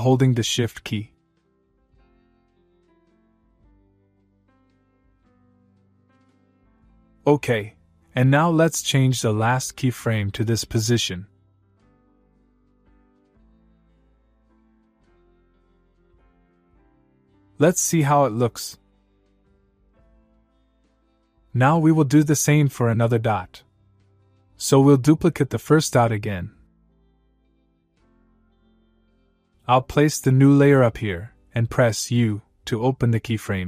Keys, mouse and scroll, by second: 3.6 shift+Right, 5.4-7.3 click, 7.5-7.9 scroll down 1, 7.9-8.4 middle click, 8.6-9.0 scroll up 1, 10.5 shift+Right, 12.8 shift+Left, 13.1 shift+Right, 14.4 scroll down 1, 14.7-16.1 middle click, 16.5-18.5 click, 18.7 space, 21.5 space, 22.1-23.0 click, 23.9 click, 26.3 click, 27.3 ctrl+d, 30.2 click, 32.0 click.